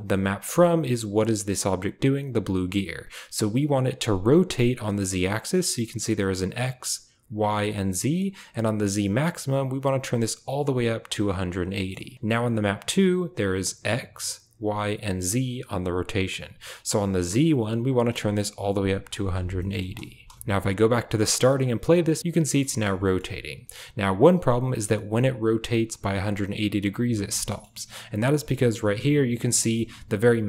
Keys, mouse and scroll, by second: 9.5-11.1 drag, 17.9-19.1 drag, 19.5 shift+middle drag, 20.3 space, 20.5 click, 21.9 click, 22.1 space, 22.2-22.5 middle drag, 22.2 space, 22.6 shift+middle click, 23.0 shift+middle click, 23.1 shift+click, 27.2 space, 27.5 click, 29.3-30.4 drag.